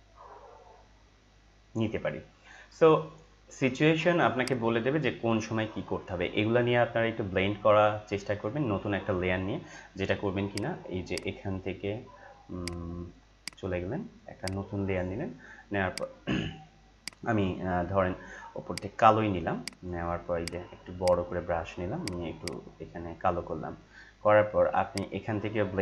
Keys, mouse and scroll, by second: 10.5 click, 17.7 click, 18.7 click, 21.0 right click, 22.0-25.0 drag.